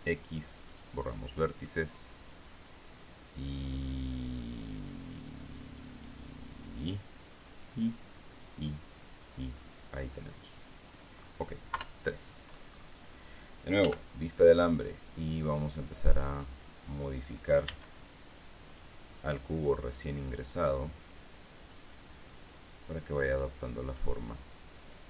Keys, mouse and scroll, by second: 0.2 x, 1.3 click, 2.2-12.0 middle drag, 12.3 KP_3, 14.4-15.0 scroll down 1, 14.4 z, 16.0 middle click, 18.2 b, 18.8 click, 20.4-22.4 drag, 23.0-24.7 drag.